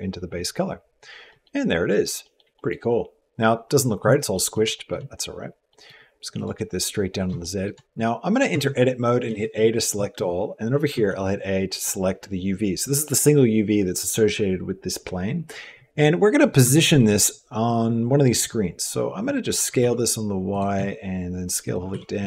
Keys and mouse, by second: 1.1 middle click, 2.0 shift+middle click, 2.3 middle click, 4.1 middle click, 4.5 shift+click, 5.5 middle click, 6.2 click, 7.2 shift+click, 7.8 middle click, 8.6 Tab, 9.1 a, 10.7 a, 16.5 shift+middle click, 19.3 s, 20.5 s, 21.7-22.2 typing.